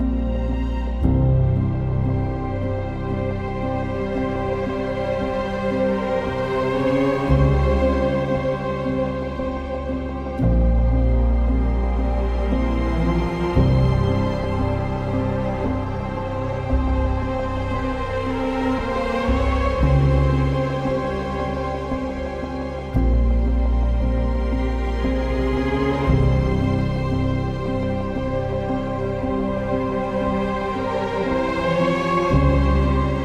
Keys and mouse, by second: 0.5 e, 0.7 x, 2.8 alt+click, 4.0 ctrl+b, 7.6 g, 7.8 g, 10.4 click, 10.7 Tab, 11.6 Tab, 12.8 2, 14.3 alt+click, 15.1 ctrl+b, 16.5 Tab, 19.2 Tab, 20.6-21.5 ctrl+KP_Add, 21.6 ctrl+KP_Add, 24.1 s, 24.3 x, 26.0 click, 26.5 g, 26.7 x, 28.4 click, 29.7 Tab, 31.9 Tab.